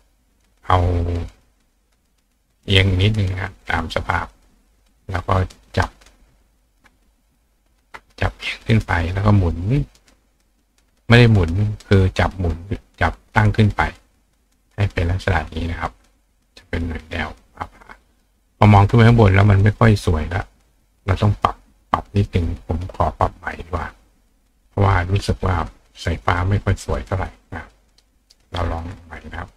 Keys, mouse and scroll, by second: 1.3 click, 2.0 click, 2.7 click, 5.3 click, 5.5-12.0 right drag, 6.0 click, 6.7-12.0 ctrl+drag, 12.5-14.5 drag, 15.0 click, 16.4 click, 20.6 click, 27.8 click, 29.2 click.